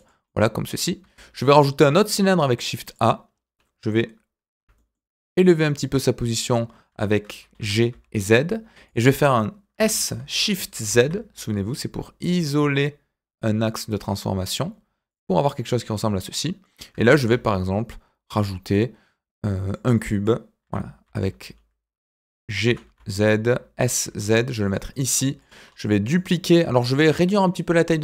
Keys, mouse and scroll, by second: 0.2-0.7 middle drag, 1.1 shift+a, 3.3-4.5 scroll down 2, 4.5 g, 15.4 click, 15.7-16.6 middle drag, 17.1 shift+a, 19.9 middle drag, 20.6 g, 24.9 middle drag, 25.4 click, 25.6-26.1 scroll up 2, 26.1-26.5 middle drag, 27.9-28.0 middle drag.